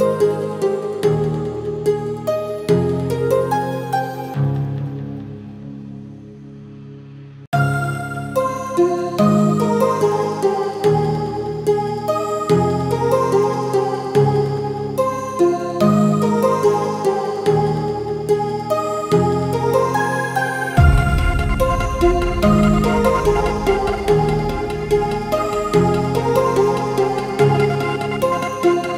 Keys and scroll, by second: 7.4 ctrl+z, 21.9 ctrl+t.